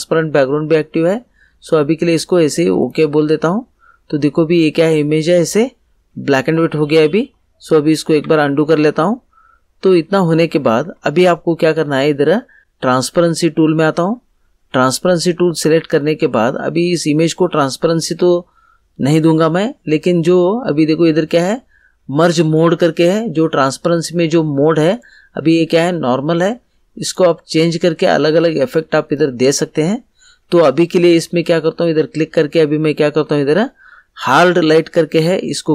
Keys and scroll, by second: 8.2 ctrl+z.